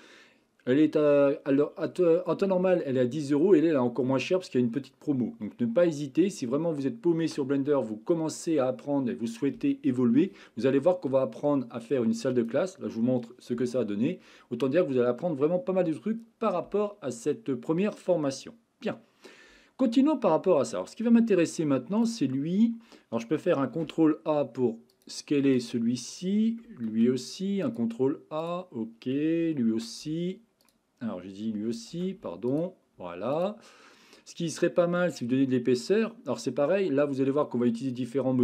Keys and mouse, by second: 20.3-21.5 middle drag, 22.0 click, 23.7 ctrl+a, 26.9 ctrl+a, 28.4 click, 29.7 ctrl+z, 31.9 ctrl+a.